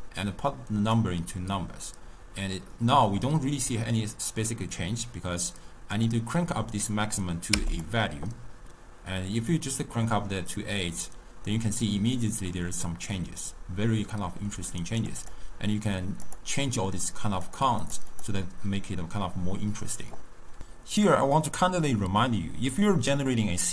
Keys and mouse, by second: 6.0-7.9 drag, 15.0-20.6 drag.